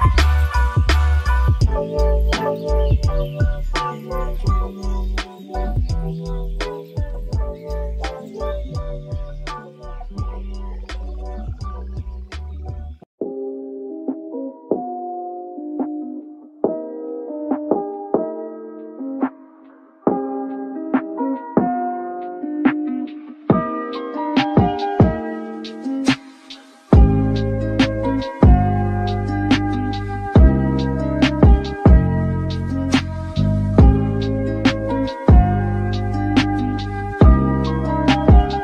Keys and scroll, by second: 1.5 b, 3.0-3.8 typing, 5.2 space, 7.5 b, 10.3-11.2 typing, 12.6 Escape, 23.4 space, 26.4 m, 35.0 Up, 35.1 Up, 35.3 Return, 36.1 space, 36.2 Escape, 37.5 b.